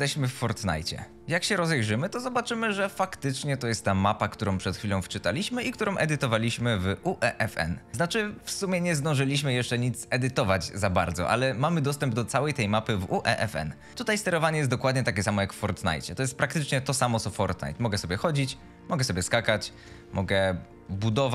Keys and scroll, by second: 0.5 Escape, 1.3 w, 13.3 d, 13.9 s, 16.3 w, 17.7 a.